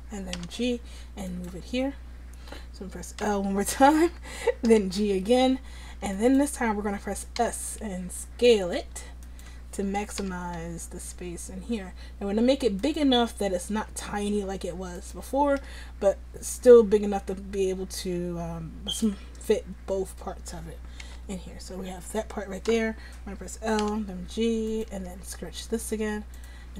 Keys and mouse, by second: 0.4 g, 3.3 l, 4.7 g, 7.5 s, 10.2 g, 13.8 s, 16.6 g, 21.1 a, 22.8 l, 23.9 g, 25.1 s.